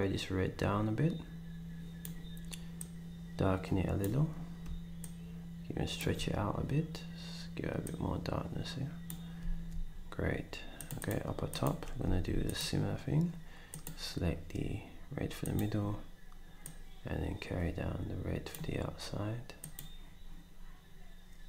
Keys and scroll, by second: 9.4 s, 12.0 d.